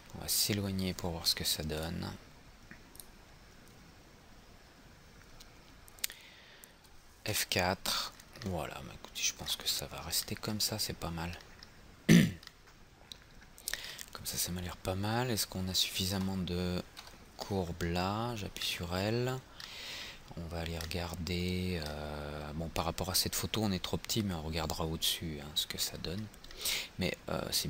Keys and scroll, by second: 7.4 F4.